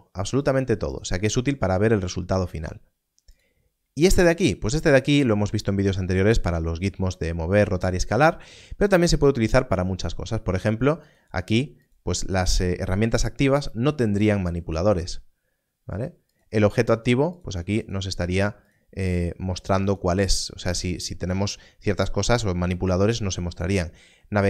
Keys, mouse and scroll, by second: 3.3 click, 11.0 click, 16.3 click.